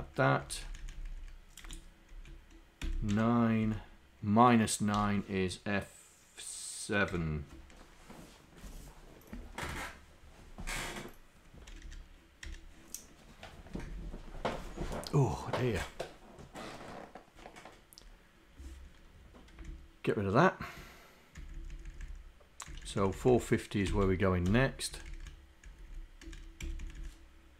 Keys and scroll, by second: 0.4 Up, 0.8 Up, 1.1 Up, 1.7 End, 2.2 Left, 2.8 Delete, 3.1 0, 3.7 Down, 5.0 BackSpace, 11.9 Home, 19.7 shift+Down, 21.4 shift+Down, 22.0 shift+Down, 22.7 shift+Down, 23.9 Delete, 25.0 Up, 25.7 Down, 26.3 Up, 26.7 End, 26.8 Left.